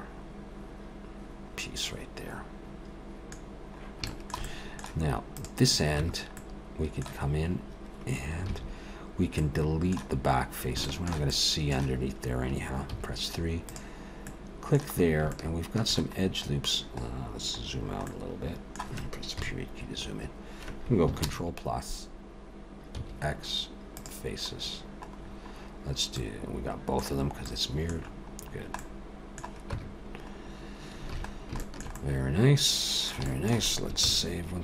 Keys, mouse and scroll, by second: 3.5-4.0 scroll down 2, 4.1 shift+middle click, 4.4 middle click, 5.4 click, 6.0 Tab, 6.4 middle click, 7.3 scroll up 2, 8.5 alt+a, 9.3 middle click, 10.2-10.8 scroll up 2, 10.8 shift+middle click, 11.3 middle click, 12.9 3, 13.7 click, 14.3 middle click, 15.1 scroll up 2, 15.3 shift+middle click, 16.2-17.1 scroll down 2, 17.1-17.8 scroll down 3, 18.1 middle click, 19.3 KP_Decimal, 21.2 ctrl+KP_Add, 23.0 x, 24.3 x, 24.6-26.0 scroll down 5, 26.0 scroll down 3, 26.2 middle click, 27.5 middle click, 28.0-28.9 scroll down 4, 28.8 middle click, 29.7 Tab, 30.4-31.0 scroll down 2, 31.1 alt+a, 31.3 scroll down 1, 31.6 shift+middle click, 31.9 middle click, 33.2 shift+middle click, 34.1 ctrl+s, 34.1 shift+middle click.